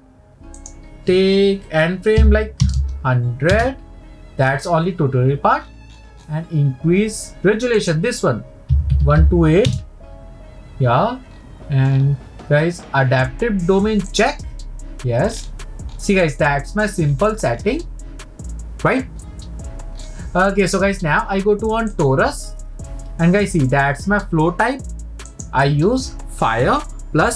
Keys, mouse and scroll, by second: 0.6-2.8 drag, 2.8 KP_0, 5.6-7.8 scroll up 2, 7.8-10.8 drag, 11.3-11.8 scroll down 1, 11.8-12.3 scroll down 8, 14.2 click, 15.3-16.3 scroll down 6, 16.3-16.8 scroll down 4, 17.3 scroll up 7, 21.0-21.6 scroll up 11, 21.9 click, 25.3-27.3 drag.